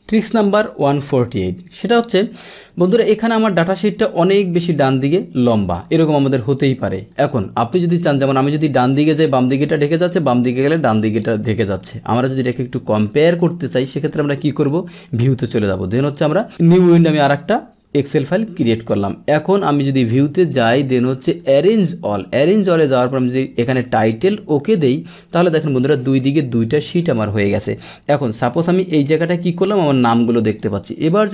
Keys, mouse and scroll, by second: 1.7 click, 4.2-5.9 drag, 7.1 click, 8.9-10.9 drag, 11.4 click, 14.4 click, 16.8 click, 19.6 click, 21.4 click, 24.7 click, 26.0 click, 26.5 click, 27.0 click, 28.2-29.2 drag, 30.5 click.